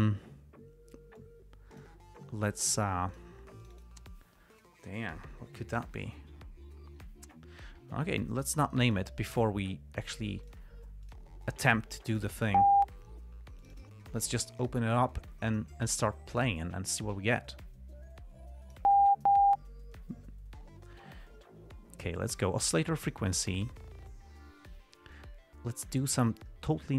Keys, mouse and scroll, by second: 1.5 click, 2.9 click, 3.4 click, 3.9 click, 8.5 Escape, 8.7 click, 9.2 click, 10.8 click, 11.4 click, 12.6 click, 13.9 click, 14.9 right click, 16.6 click, 17.3-19.2 drag, 22.3 click, 23.4 click, 25.5-26.5 drag.